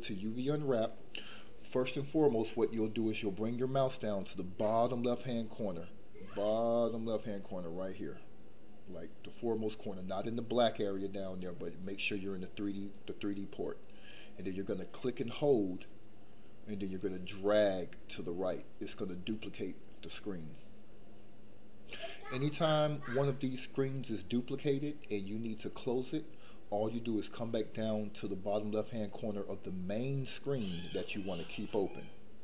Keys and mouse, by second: 15.3-19.2 drag.